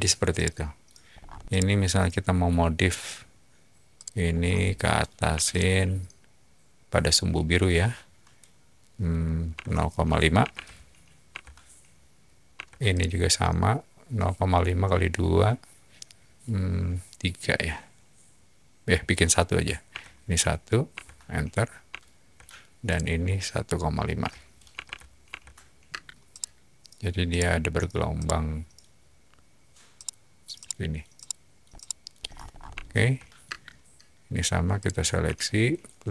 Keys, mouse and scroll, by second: 0.3 middle click, 1.1 scroll up 1, 1.4-2.3 middle drag, 3.9 click, 4.3 middle click, 5.3-7.6 typing, 5.5 click, 9.2-11.0 typing, 11.3 Return, 12.5 Escape, 12.9 click, 13.2 typing, 19.9 1, 20.9 Return, 21.9 shift+middle click, 22.8 click, 24.2-25.8 typing, 26.3 middle click, 27.3-27.7 middle drag, 28.1 middle click, 29.9-30.3 middle drag, 30.5 middle click, 31.1 middle click, 31.6 scroll up 1, 31.7 middle click, 32.2-32.6 scroll down 3, 32.2 middle click, 32.4 middle click, 32.7-33.3 shift+middle drag, 33.4 space, 34.8 click, 35.6 shift+click.